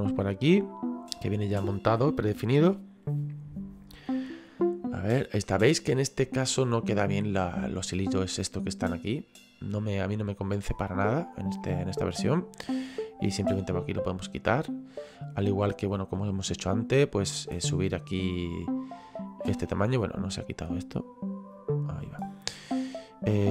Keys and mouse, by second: 10.1 middle click, 11.6 middle click, 13.1 click, 15.9 middle click, 17.3 click, 21.5 click.